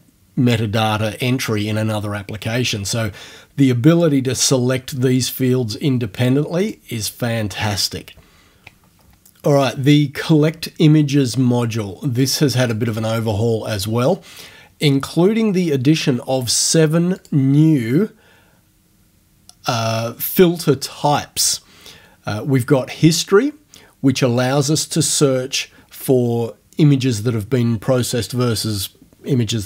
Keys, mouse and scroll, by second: 3.9 click, 4.5 click, 5.2 click, 6.2 click, 6.6 click, 12.6 click, 17.2 click.